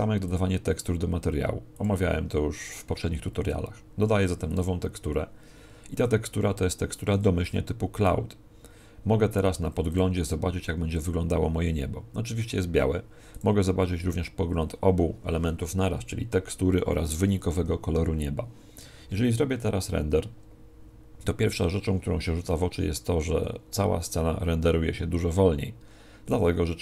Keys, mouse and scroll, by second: 0.2 click, 4.4 click, 9.9 click, 13.3 click.